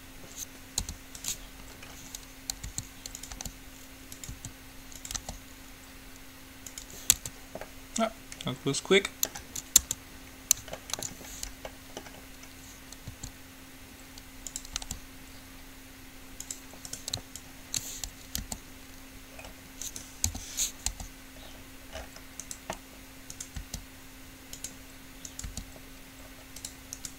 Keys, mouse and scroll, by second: 0.0-1.5 drag, 1.0 u, 2.0-3.6 middle drag, 3.0 s, 3.5 g, 4.5 s, 5.4 g, 7.3 Tab, 10.0 Tab, 13.3 s, 15.0 g, 17.0-19.0 right drag, 17.5-19.5 drag, 18.5 g, 20.5 o, 21.0 g, 23.4 right click, 23.8 g, 25.6 g, 27.0 right click.